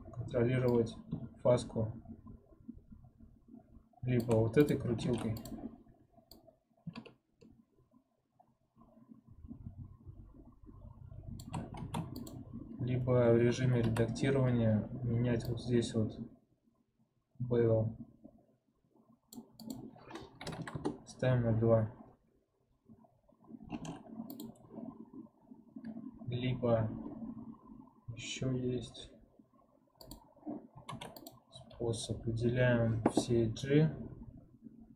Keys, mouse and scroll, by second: 0.6-3.6 drag, 4.5 click, 4.9 ctrl+Tab, 6.2-9.2 drag, 11.7 ctrl+Tab, 13.5 2, 13.7 a, 15.3-18.3 drag, 19.5-22.5 drag, 23.7 ctrl+Tab, 29.9 click, 30.8 ctrl+Tab.